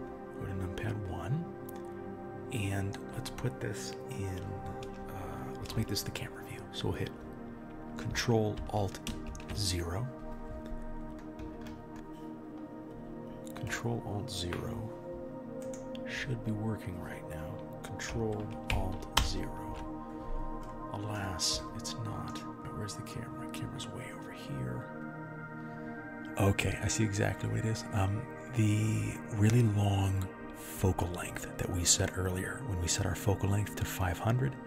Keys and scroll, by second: 10.7 ctrl+alt+KP_0, 19.2 ctrl+alt+KP_0, 26.5 g, 31.2 KP_1.